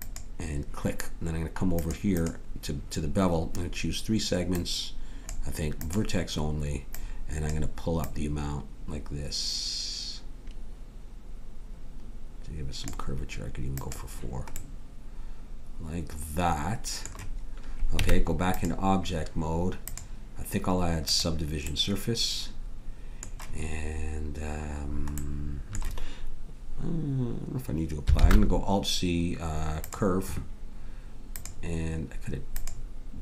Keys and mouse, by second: 1.8-4.0 drag, 4.5-12.9 drag, 13.8-15.7 drag, 18.0 Tab, 19.9-21.9 drag, 24.3-25.3 middle drag, 28.2 alt+c, 31.3-33.2 drag.